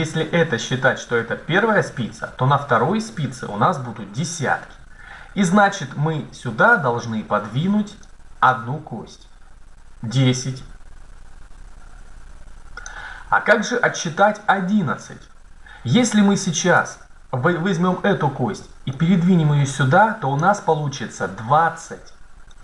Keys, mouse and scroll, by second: 7.8-10.1 drag, 16.7-18.2 right drag, 18.8-20.5 drag, 22.3 right click.